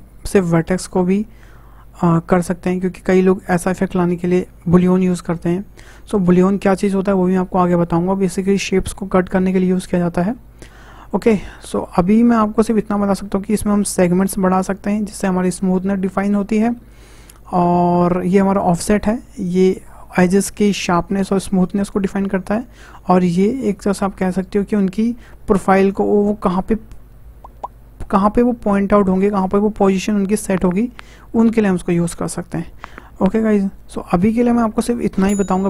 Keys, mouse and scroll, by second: 13.6-16.7 drag, 17.2 click, 18.3-21.3 drag, 23.2 click.